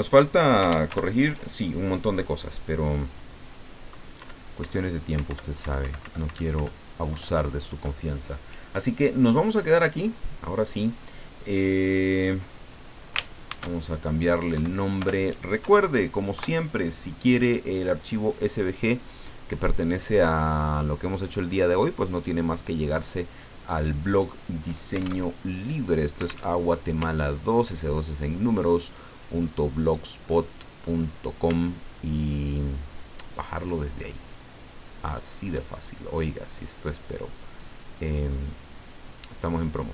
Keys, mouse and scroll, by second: 0.9 ctrl+shift+g, 2.5 click, 4.2 Up, 5.3 alt+Up, 7.1 alt+Down, 10.8 click, 13.4 ctrl+shift+s, 14.5 Right, 15.0 BackSpace, 15.6 KP_8, 16.3 KP_Enter, 25.3 alt+Tab, 26.5 alt+Tab, 27.2 ctrl+scroll up 2, 27.9-29.0 ctrl+middle drag, 29.1 click, 29.8-31.5 drag, 32.1 shift+click, 34.6 shift+click, 35.1 shift+click, 36.1-39.4 drag.